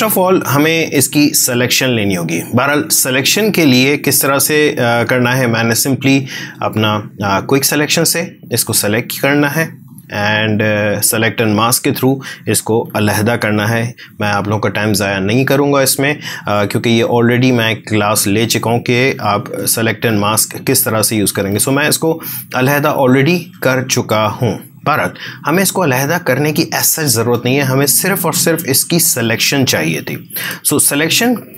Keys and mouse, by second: 5.9-14.8 drag, 16.1 click, 21.7 click, 21.9 space, 23.0 click, 23.2 space, 24.0 click, 24.1-26.2 ctrl+drag.